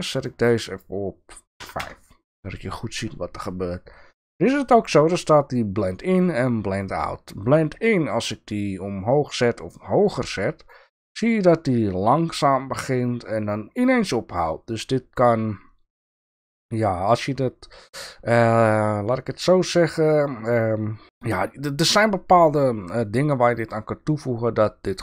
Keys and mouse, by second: 24.8 click.